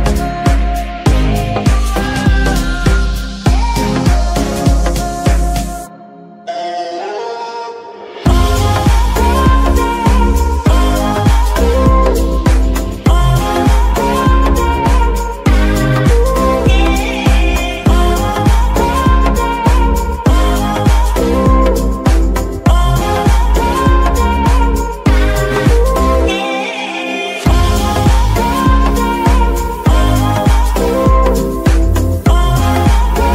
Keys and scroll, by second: 1.2 F2, 2.6 Right, 3.1-4.1 typing, 4.4 Return, 18.7 a, 18.9 x, 19.8 l, 20.3 Return, 23.2 b, 23.6 BackSpace, 24.1 Right, 24.2 Right, 24.4 Right, 24.9 Right, 25.6-26.3 typing, 26.6 Return, 28.2 g, 30.9 Tab, 31.4 z, 32.7 Tab, 33.0 z.